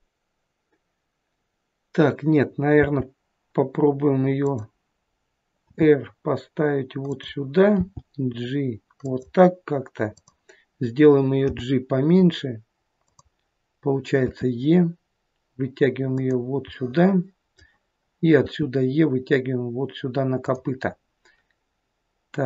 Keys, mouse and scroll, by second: 2.8 g, 5.7 r, 7.8 g, 10.2 click, 11.6 g, 14.3 e, 16.8 middle click, 18.4 e.